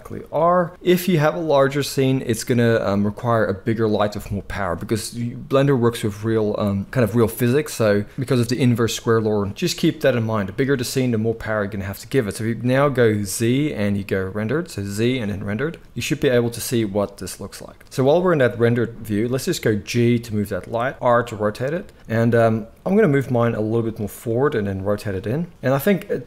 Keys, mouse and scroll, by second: 13.2 z, 19.7 g, 20.9-26.1 middle drag, 20.9 r, 22.1 KP_7, 23.1 g, 24.2 r, 26.1-26.2 drag.